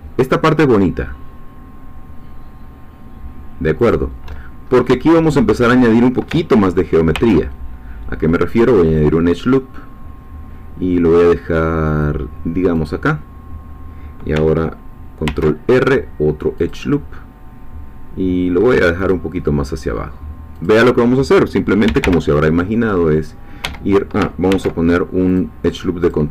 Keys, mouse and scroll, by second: 3.8 shift+click, 4.6 shift+scroll up 2, 7.1 ctrl+r, 8.5 click, 12.8-14.3 drag, 15.2 ctrl+r, 16.6 click, 19.0 click, 20.6-21.8 drag, 21.8 g, 22.0 y, 23.6 Escape, 24.5 ctrl+r, 25.3 click, 26.0 click.